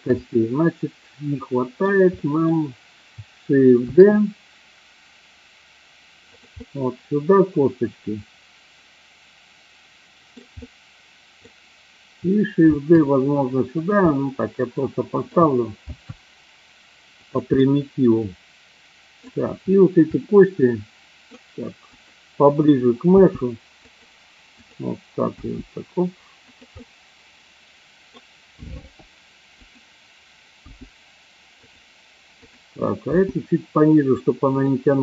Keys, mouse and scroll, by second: 0.4-1.7 middle drag, 2.2 middle click, 3.7 shift+d, 6.4 click, 6.6-10.2 middle drag, 10.6 middle click, 12.7 shift+d, 13.7 click, 14.1-15.2 middle drag, 15.8 shift+d, 17.2 click, 17.6-19.2 middle drag, 20.1-21.2 middle drag, 23.1 g, 23.9 click, 24.6 click, 25.2 g, 26.4 click, 26.8-28.1 middle drag, 28.9 r, 29.5 click, 30.5 g, 31.5 click, 32.4 click, 33.1 g, 34.5 click.